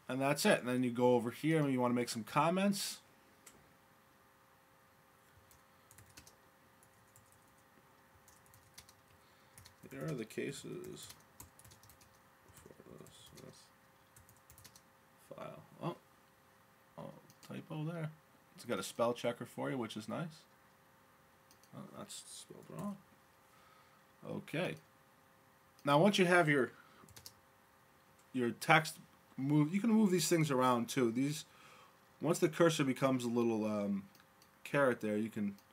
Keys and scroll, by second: 0.0-1.9 typing, 6.2-15.2 typing, 22.8 BackSpace, 25.0 typing, 27.2 typing, 29.2 space.